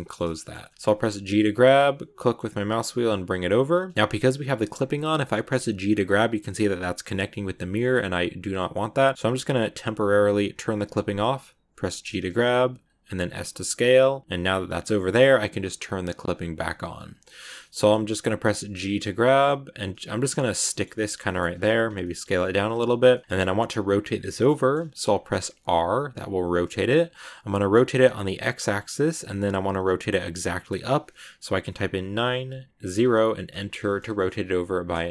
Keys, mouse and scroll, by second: 1.2 g, 3.9 middle click, 3.9 g, 4.8 click, 7.3 g, 10.6 click, 14.5 g, 16.1 click, 16.5 middle click, 17.5 scroll up 1, 17.5 middle click, 18.4 g, 19.7 scroll down 1, 19.8-21.0 middle drag, 21.0-21.6 scroll up 5, 21.1 middle click, 21.6 s, 22.7-25.4 middle drag, 25.4 r, 34.1-35.1 middle drag.